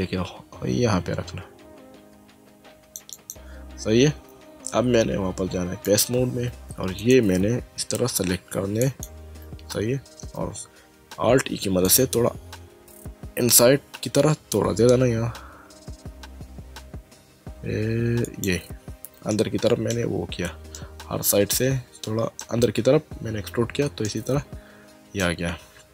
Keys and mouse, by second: 0.0 click, 3.1 click, 5.8 click, 7.0 click, 8.8 alt+click, 11.3 alt+e, 11.9 click, 18.3 click, 19.3 middle click, 20.8 middle click, 23.5 Tab, 24.1 middle click.